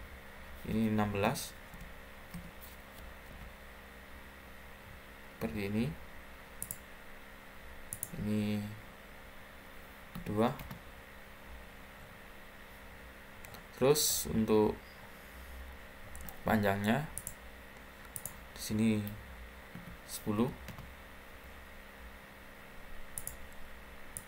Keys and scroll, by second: 0.8-3.2 typing, 10.0 2, 10.5 Return, 19.6-20.8 typing.